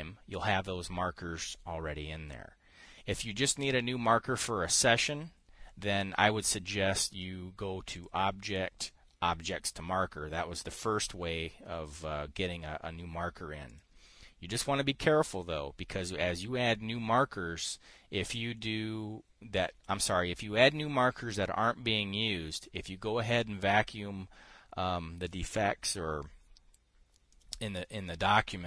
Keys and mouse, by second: 8.4 click, 14.1 click, 18.7 click, 27.8 click.